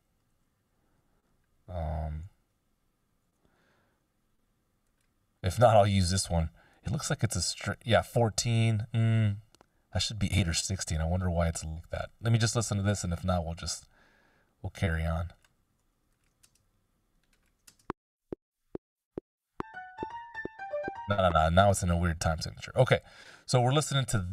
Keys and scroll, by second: 0.2 super+z, 2.2 super+f, 3.2 super+f, 16.6 space, 17.7 space, 21.0 space, 21.5 BackSpace.